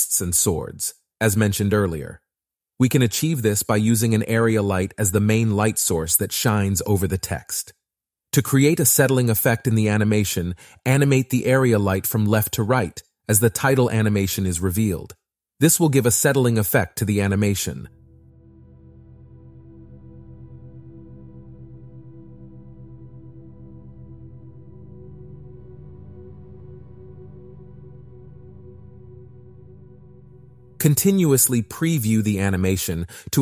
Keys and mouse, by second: 1.9 r, 3.6 click, 3.8 g, 5.8 click, 6.6-8.1 drag, 10.4 click, 12.7 g, 12.8 ,, 15.0 click, 18.4 middle click, 19.9 i, 21.2-22.2 drag, 22.6 space, 24.0 shift+d, 25.1 click, 26.5 a, 26.9 g, 28.7-29.8 right drag, 31.5-32.5 drag, 32.7 space.